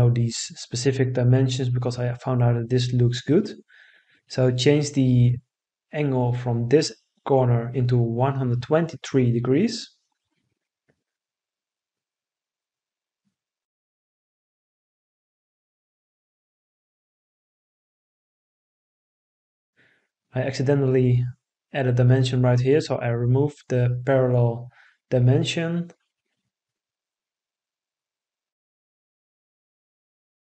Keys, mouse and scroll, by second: 6.4 1, 7.2 2, 8.0 3, 10.2 Return, 15.6 Escape, 16.7 Escape, 24.2 Delete.